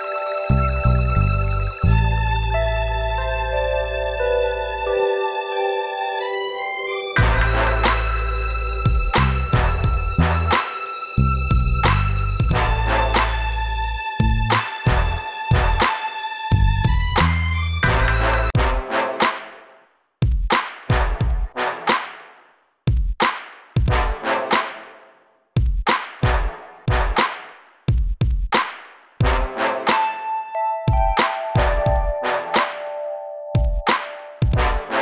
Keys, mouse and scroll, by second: 1.0 click, 1.1 click, 1.6-2.2 scroll up 1, 5.0 click, 5.1 click, 5.9 click, 7.2 click, 7.6 click, 7.9 click, 8.6 scroll up 1, 11.5 click, 14.6 scroll down 2, 16.6 click, 16.8 click, 17.2 click, 17.3 click, 18.3 scroll up 1, 18.8 scroll down 2, 21.5 click, 21.6 click, 23.1 click, 23.2 click, 26.1 shift+Return, 26.9 click, 27.0 click, 28.4 click, 29.2 click, 29.7 scroll up 2, 31.2 click, 34.9 click.